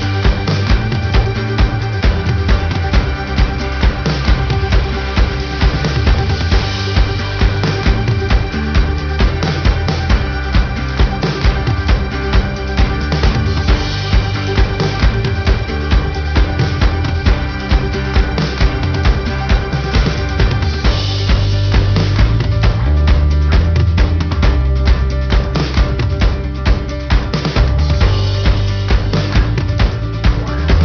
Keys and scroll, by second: 10.4 ctrl+alt+shift+n, 20.5 ctrl+alt+shift+n.